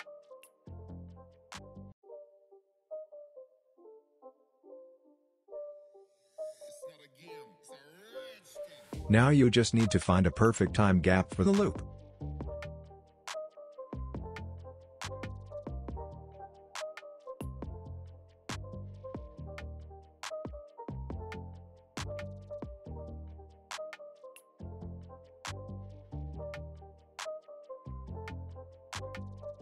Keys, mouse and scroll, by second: 2.1 space, 2.9 click, 5.1 space, 8.0 space, 8.7-9.4 alt+scroll down 1, 10.0-20.9 drag.